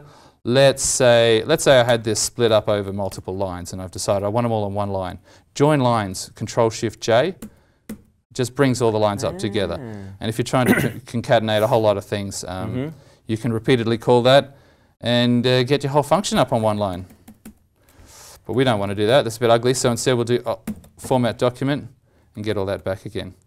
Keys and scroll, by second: 2.3 ctrl+Right, 7.3 ctrl+shift+j, 7.8 ctrl+shift+j, 16.9 ctrl+shift+j, 17.0 ctrl+shift+j, 17.2 ctrl+shift+j, 17.4 ctrl+shift+j, 18.4 ctrl+z, 18.6 ctrl+z, 18.8 ctrl+z, 19.1 ctrl+z, 20.6 ctrl+alt+f, 22.2 ctrl+z, 22.7 ctrl+z.